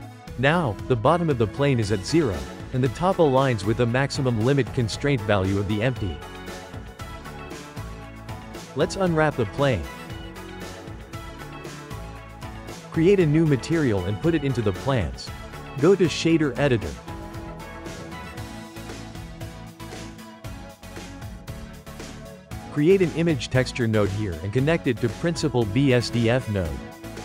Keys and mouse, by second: 1.0 Tab, 1.9 click, 2.1-3.2 shift+middle drag, 3.2 g, 6.6 click, 7.4 click, 8.1 Tab, 8.7 a, 9.2 u, 11.2 click, 16.9 click, 18.5-20.1 drag, 20.1-22.3 shift+middle drag, 22.3 shift+a, 25.9 click, 27.1 click.